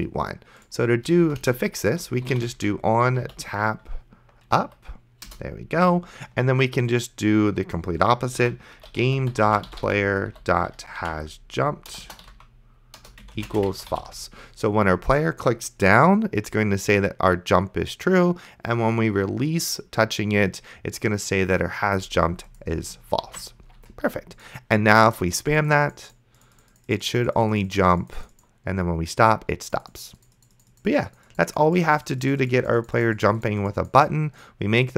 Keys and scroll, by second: 1.5 Return, 2.0-3.8 typing, 4.6 Down, 5.3 Return, 8.1-14.5 typing, 13.0 Return, 23.5 ctrl+s.